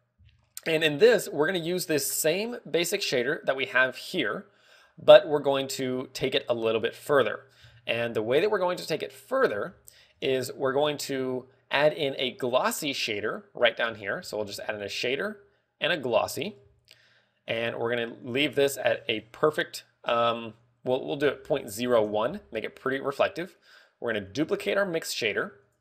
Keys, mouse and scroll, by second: 3.5 click, 4.1 middle click, 7.6 click, 8.7 middle click, 9.4-9.8 scroll down 2, 9.7 middle click, 10.2-10.7 scroll up 4, 10.7 a, 10.9 click, 14.1 middle click, 15.0 shift+a, 17.1 g, 18.1 click, 18.7 ctrl+click, 23.6 middle click, 24.8 click, 25.1 shift+d.